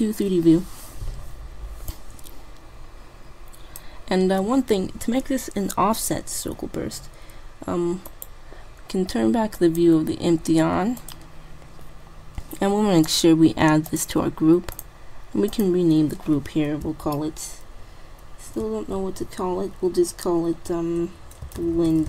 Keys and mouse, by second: 1.9-3.5 drag, 8.1-10.0 right drag, 9.6-12.8 drag, 13.2-17.2 drag.